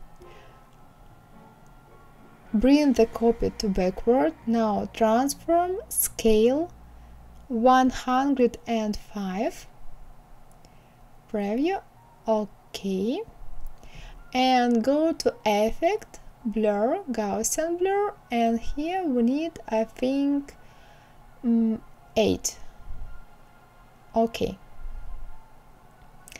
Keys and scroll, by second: 7.8 KP_1, 8.3 KP_0, 8.6 KP_5.